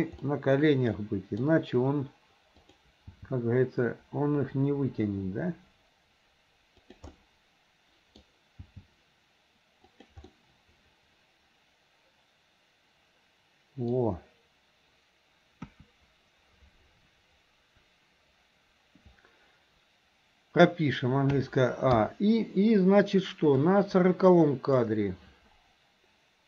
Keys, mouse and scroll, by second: 0.3-1.5 middle drag, 7.1-8.3 middle drag, 9.1 g, 10.4-14.1 middle drag, 15.6 KP_1, 21.4 a, 22.0 i, 23.7-24.9 drag.